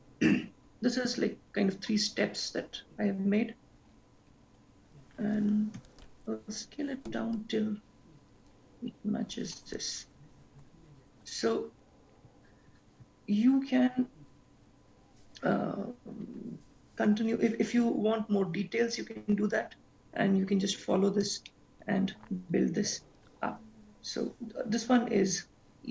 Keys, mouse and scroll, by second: 6.0 s, 11.1-12.8 scroll down 6, 13.2 ctrl+s, 14.0-14.4 scroll down 1, 14.8-15.1 scroll down 2, 15.1-16.7 scroll up 12, 17.3 scroll down 1, 17.8-18.7 scroll down 1, 21.6 shift+middle click.